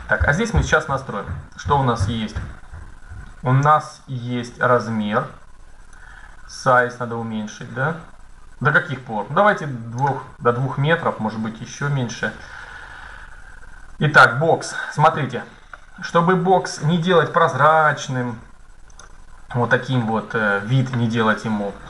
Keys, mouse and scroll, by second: 5.7-7.5 drag, 10.2-13.6 middle drag, 15.2 middle click, 17.0 middle click, 17.9 z, 19.5-21.8 middle drag.